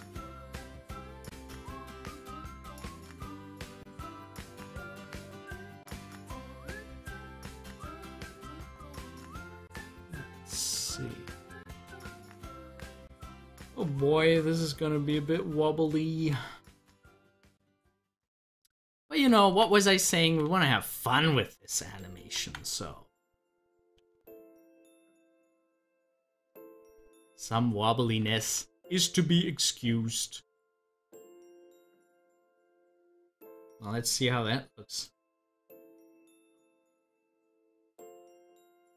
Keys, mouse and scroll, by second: 0.3-8.9 drag, 8.9 ctrl+z, 13.6-19.4 drag, 19.5 ctrl+z, 24.1 z, 24.7-28.4 drag, 28.4 ctrl+z, 32.0 scroll down 1, 32.7-34.9 middle drag, 34.9 click, 35.0 double click, 35.5 scroll up 1, 35.9-37.4 middle drag, 37.4-38.9 drag.